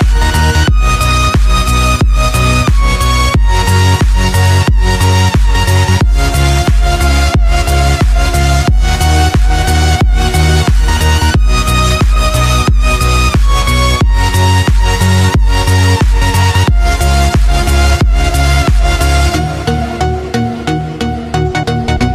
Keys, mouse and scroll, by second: 10.4 Tab, 12.0-13.1 shift+middle drag, 13.1-15.2 scroll up 1, 15.2 click, 16.6 shift+click, 17.1 shift+click, 17.8-18.8 scroll down 1, 18.8 shift+click, 19.3 shift+click, 21.0 click.